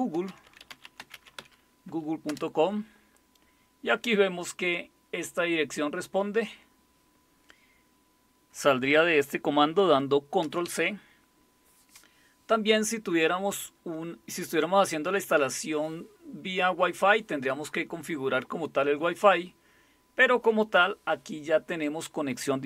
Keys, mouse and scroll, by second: 0.0-1.9 typing, 2.3 Return, 10.4 ctrl+c.